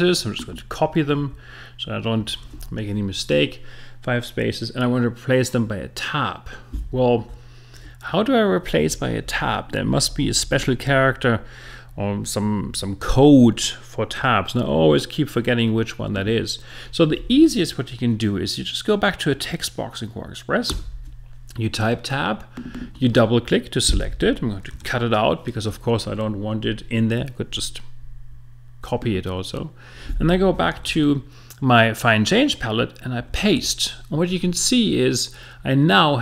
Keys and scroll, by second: 7.7 Tab, 20.7 Tab.